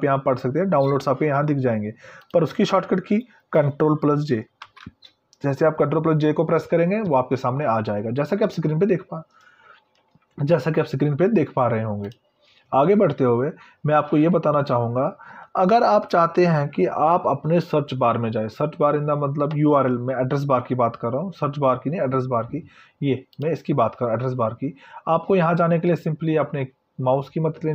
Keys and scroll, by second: 4.8 ctrl+j.